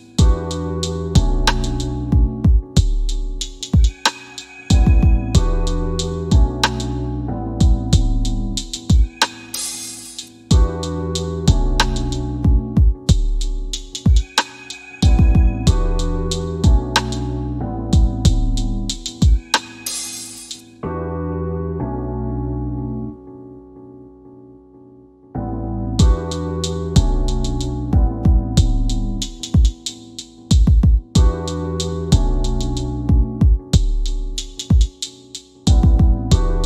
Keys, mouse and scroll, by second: 0.5-1.9 scroll up 1, 1.9 click, 2.4-3.1 scroll down 1, 3.1 click, 10.5 Escape, 11.9 click, 22.7 click, 29.0 scroll down 1, 32.3 click.